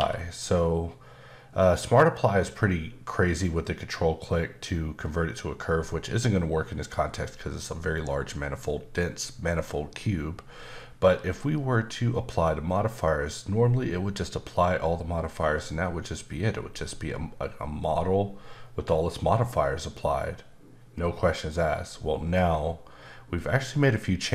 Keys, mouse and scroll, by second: 0.0 q.